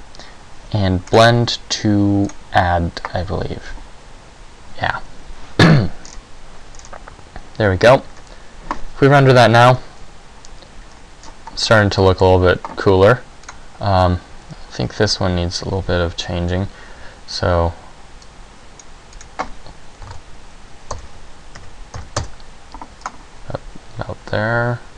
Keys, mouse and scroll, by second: 1.3 click, 6.2-6.9 scroll down 1, 6.9-8.3 scroll down 3, 8.3 scroll down 2, 8.3 scroll up 1.